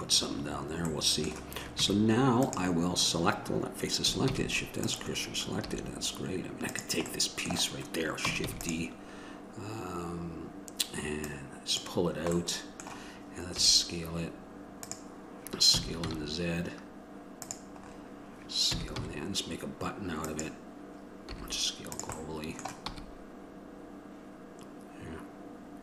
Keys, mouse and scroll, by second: 2.0 Tab, 4.5 shift+s, 5.8 a, 6.9 right click, 7.3-8.7 middle drag, 8.7 shift+d, 12.0 click, 12.6-15.0 middle drag, 15.9 s, 18.0-18.9 scroll up 1, 18.9-20.4 scroll up 1, 20.4-21.5 scroll up 1, 21.5 s, 22.4-25.0 drag, 23.1 e.